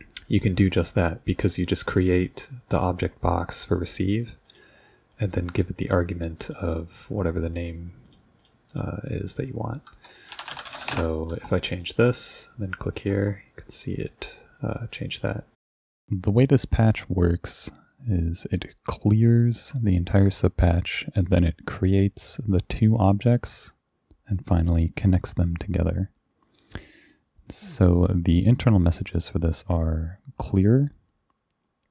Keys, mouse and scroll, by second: 3.8 click, 4.5 click, 5.1 click, 6.4 click, 8.1 click, 8.4 click, 8.7 click, 9.1 drag, 10.1-11.5 typing, 11.7 click, 12.6 ctrl+click, 27.1 click.